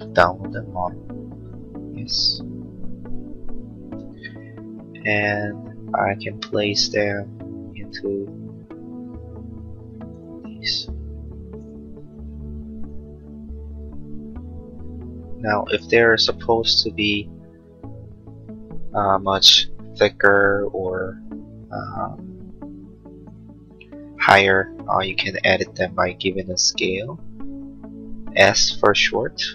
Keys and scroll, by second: 26.6 s.